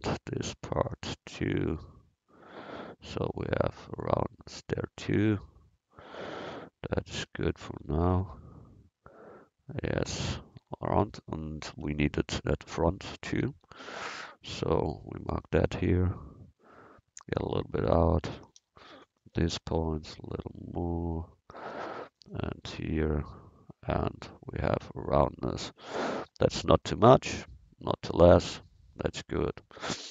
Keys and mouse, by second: 7.2 a, 7.7 Tab, 8.1-8.9 middle drag, 11.8 Tab, 14.5 c, 16.3-18.0 drag, 18.3 a, 18.6 c, 19.6-21.4 drag, 21.4 a, 21.7 c, 22.2 click, 25.8 Tab.